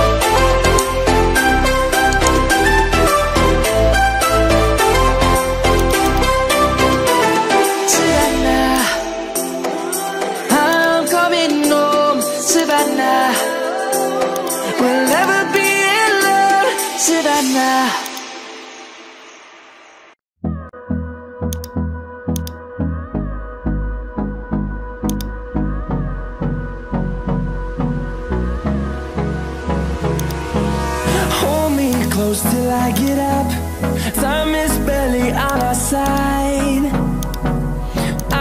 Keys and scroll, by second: 3.8 Return, 6.8 Return.